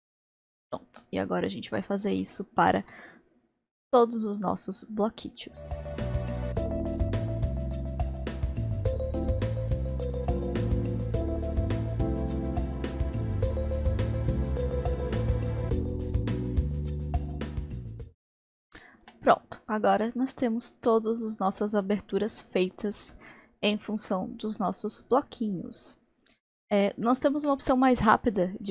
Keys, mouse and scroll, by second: 0.1-5.4 middle drag, 6.5 middle click, 7.3 click, 8.9 click, 9.3 click, 10.7 click, 11.0 click, 11.7 click, 13.5 click, 14.0 click, 15.2 click, 16.8 click, 17.2-18.5 drag, 18.5-19.4 shift+middle drag, 19.4-19.9 scroll down 1, 19.9-24.6 middle drag, 27.1-28.7 middle drag.